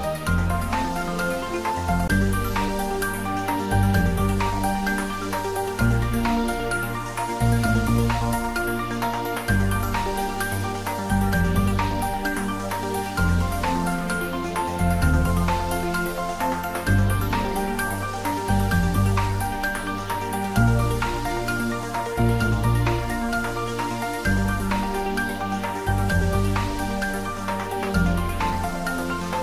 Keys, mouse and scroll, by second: 3.1 click, 6.5 click, 6.6-14.1 drag, 14.8-15.9 typing, 16.2 Return, 19.9 click, 20.0-23.8 drag.